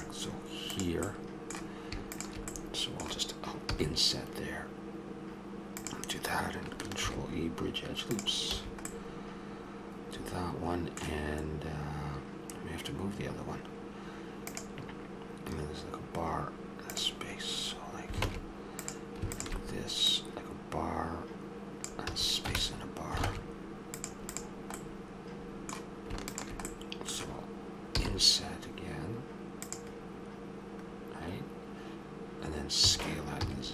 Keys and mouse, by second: 0.7-5.8 drag, 3.7 i, 7.1 ctrl+e, 8.5 a, 9.2-10.2 middle drag, 18.3 ctrl+Tab, 19.3-22.1 drag, 22.1 a, 23.3 ctrl+Tab, 24.3 click, 26.7-28.1 drag, 28.0 i, 32.8 s.